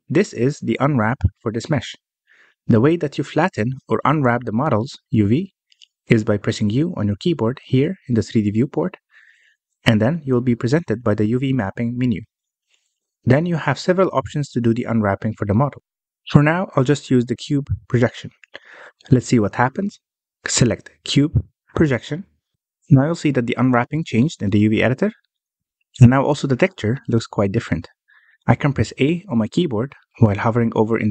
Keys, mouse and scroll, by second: 1.4 ctrl+z, 1.9-2.5 scroll down 1, 2.5-3.5 scroll down 12, 3.5-3.8 scroll up 1, 3.8-5.8 middle drag, 5.8-7.2 scroll up 2, 7.2 middle click, 8.2 u, 19.7-20.8 scroll up 9, 20.8-23.1 middle drag, 23.1 u, 25.8-26.3 scroll up 3, 26.3-31.0 middle drag, 31.0 a.